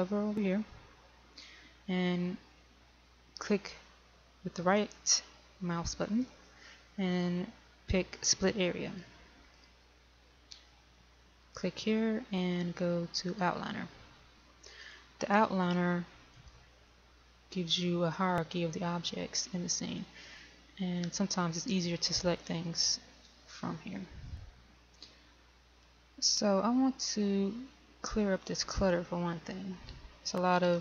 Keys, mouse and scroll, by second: 6.5 right click, 9.3-16.3 drag, 21.0-22.2 scroll down 1, 26.2-27.5 scroll up 1, 28.7-29.9 scroll down 1, 29.9-30.8 scroll up 1.